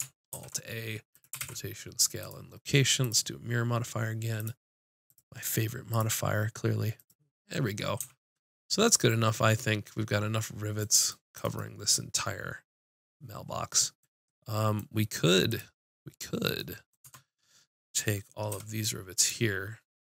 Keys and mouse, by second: 0.3 ctrl+a, 1.4 ctrl+a, 3.1-4.6 drag, 5.1-8.7 drag, 8.0 a, 15.5-17.0 drag, 17.0 Tab, 18.5 b.